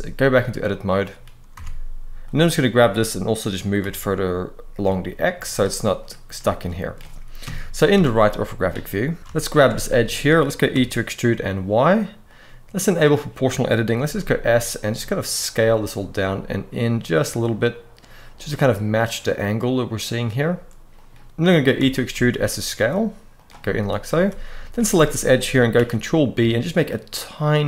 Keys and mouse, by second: 0.4 middle click, 1.3 Tab, 2.0 click, 2.5 g, 3.5 y, 4.6 x, 5.2 click, 6.1-6.6 middle drag, 7.1 KP_3, 7.6 Tab, 9.2 alt+shift+a, 9.2 alt+shift+click, 9.8 shift+click, 10.4 e, 11.0 y, 12.7 click, 13.7 s, 20.7 click, 21.5 e, 21.8 s, 23.3 middle click, 23.8 alt+a, 25.5 ctrl+b.